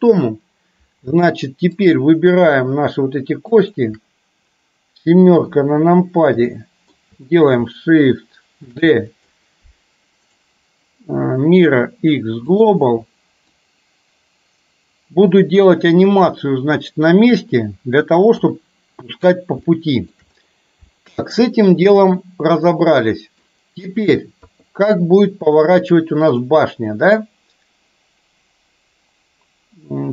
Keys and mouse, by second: 1.8 click, 3.6 shift+click, 5.4 KP_7, 6.5 shift+middle click, 8.8 shift+d, 10.3-12.8 right drag, 13.6-17.4 drag, 18.5 KP_3, 19.8 shift+middle click, 21.0 shift+middle click, 21.9-23.5 middle drag, 24.5 KP_3, 26.4 click.